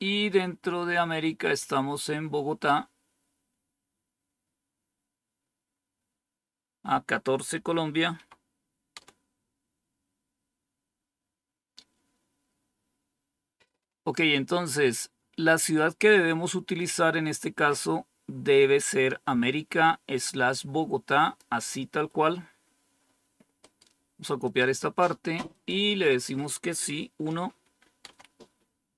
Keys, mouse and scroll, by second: 7.8-8.6 typing, 8.8 Return, 17.2-21.3 drag, 24.3 click, 25.4 click, 28.0 Return.